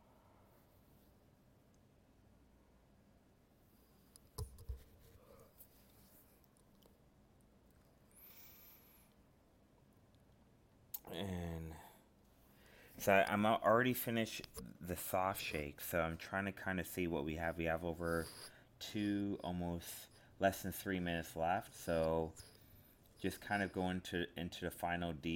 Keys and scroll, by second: 2.0 alt+space, 8.5 alt+space, 16.3 ctrl+z, 21.1 alt+space, 24.2 alt+space.